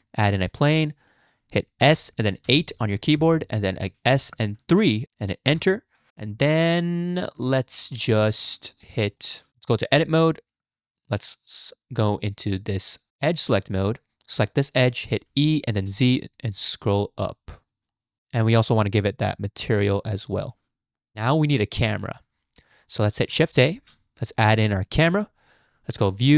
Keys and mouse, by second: 1.8 s, 4.2 s, 6.1 click, 6.5-7.3 shift+drag, 7.5 shift+drag, 7.8-8.8 shift+middle drag, 9.2 shift+middle click, 9.9 Tab, 13.3 click, 15.3 e, 17.9 click, 18.2 Tab, 18.9 click, 20.0 middle click, 20.9 middle click, 23.7 shift+a, 26.1-26.3 drag.